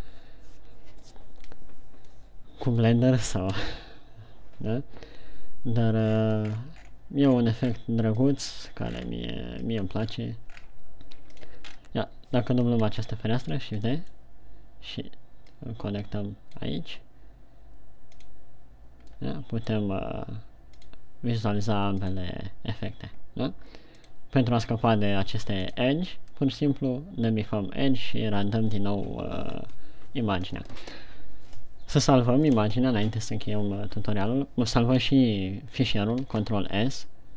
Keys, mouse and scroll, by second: 36.8 ctrl+s.